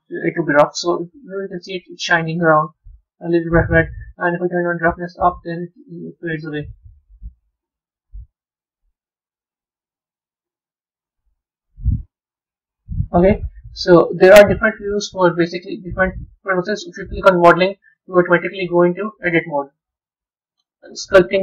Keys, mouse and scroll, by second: 0.8-2.4 middle drag, 2.4-3.3 scroll up 4, 4.3-8.9 drag, 12.1-13.7 drag, 13.7-15.4 scroll down 1, 15.4 click, 18.6 click, 20.4 drag.